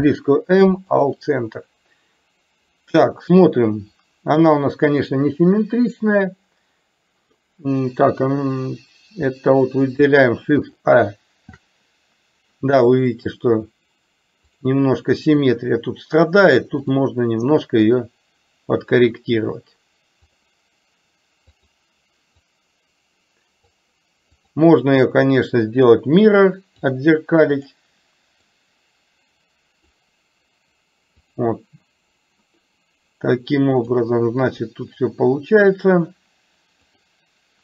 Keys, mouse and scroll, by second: 17.0 click, 18.0-19.0 drag, 20.5 click, 21.6 click, 22.6-23.8 drag, 24.5 click, 25.5-27.0 drag, 27.6 click, 28.7-30.0 drag, 34.0 click, 34.8-36.0 drag, 37.0 click.